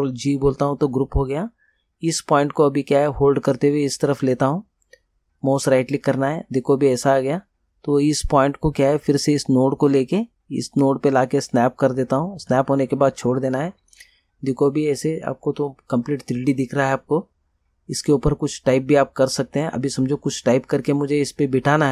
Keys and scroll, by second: 0.3 ctrl+g.